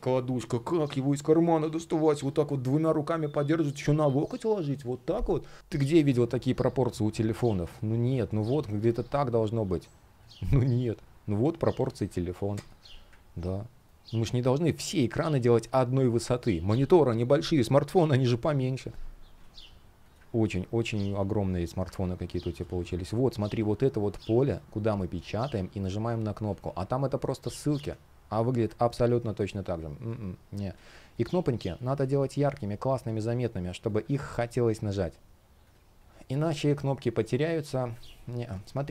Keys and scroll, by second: 5.6 shift+p, 8.0 space, 13.5 shift+p, 19.1 space, 22.3 space, 26.1 space, 28.7 super+z, 29.1 space, 32.0 shift+x, 34.5 super+\, 38.2 space.